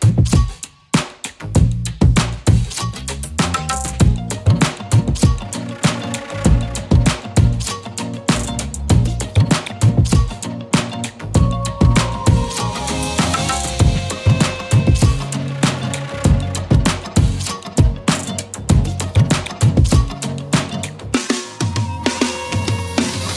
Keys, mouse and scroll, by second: 2.1 right click, 2.8 click, 4.0-5.9 drag, 7.5 z, 7.8 click, 8.1-8.6 z, 8.3 space, 8.7-9.5 click, 9.1 space, 9.2 click, 13.3-15.5 typing, 13.5 click, 14.1 click, 15.2 click, 16.0 ctrl+z, 17.3 ctrl+shift+z, 17.9 click, 18.1 space, 18.2 click, 20.5 right click.